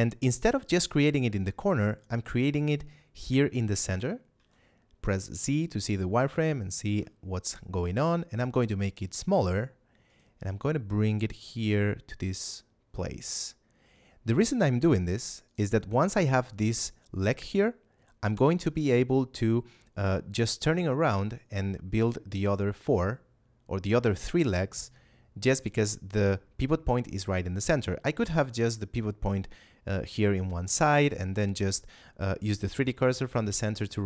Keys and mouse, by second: 4.3 z, 6.7 s, 10.0 click, 10.3 g, 15.4 click, 25.9 Tab.